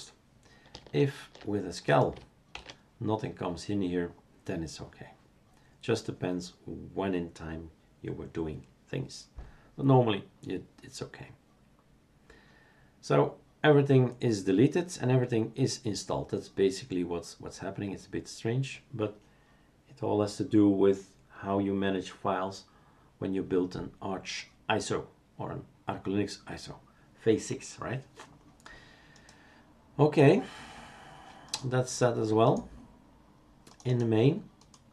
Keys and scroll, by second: 2.6 shift+super+q.